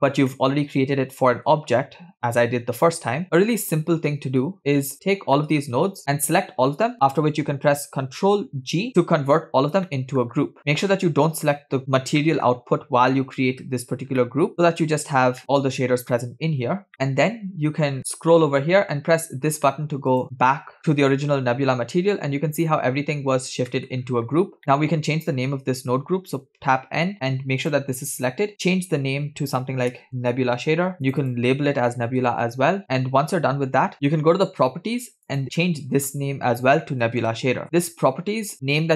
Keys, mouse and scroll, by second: 0.1 scroll down 2, 0.4-1.7 middle drag, 1.7-2.1 scroll up 2, 3.2-4.0 scroll down 7, 4.1 middle click, 4.6-5.4 scroll down 5, 5.4 middle click, 8.8 ctrl+g, 9.9 middle click, 10.3-10.7 scroll up 8, 10.7 middle click, 11.1-11.8 scroll up 2, 11.8-12.2 scroll down 5, 12.2 middle click, 12.6-12.9 scroll up 2, 12.9-13.6 scroll down 5, 13.4 middle click, 14.2 middle click, 15.4 middle click, 18.0-20.1 scroll down 7, 20.1 scroll down 1, 20.1 click, 20.8 middle click, 20.8-21.1 scroll up 3, 22.0-23.7 drag, 23.8 middle click, 24.0-24.6 scroll up 5, 24.6 click, 27.1 n, 27.6 click, 28.5-31.3 drag, 31.4-32.8 drag, 35.3-37.6 drag.